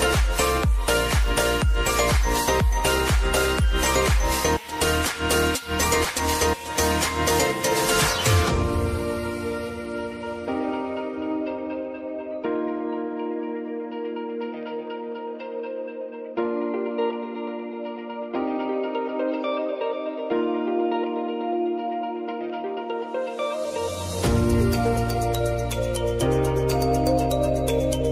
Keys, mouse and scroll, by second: 2.6-4.0 drag, 4.0 space, 6.2 click, 7.1 space, 8.9 click, 10.8 space, 12.3 click, 18.3 click, 20.2 shift+c, 21.0 ctrl+a, 21.9 click, 27.2 ctrl+alt+Home.